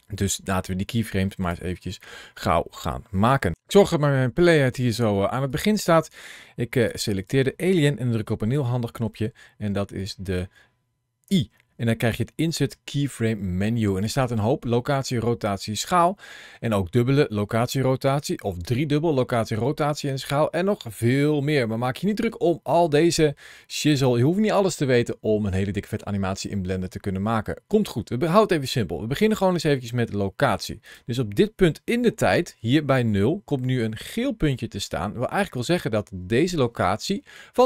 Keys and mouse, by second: 4.2 click, 5.3 click, 7.0 click, 9.8 click, 11.1 i, 31.9 ctrl+shift+a.